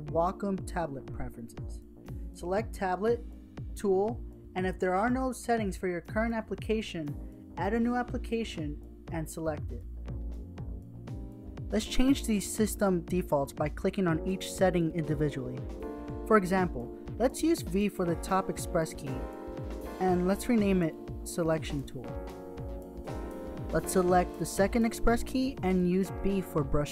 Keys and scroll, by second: 17.7 v, 19.7-21.8 typing, 26.3-26.9 typing.